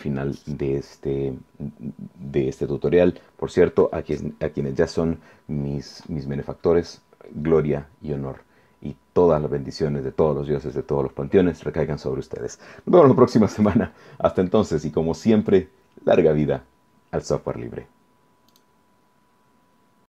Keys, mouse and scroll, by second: 18.5 click.